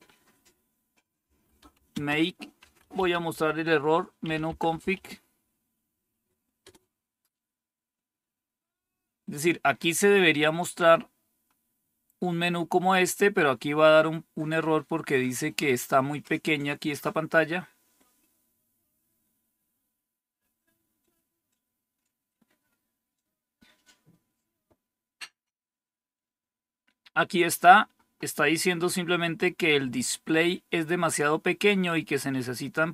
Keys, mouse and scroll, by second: 0.9-5.3 typing, 6.5 Return, 10.9-12.2 scroll down 3.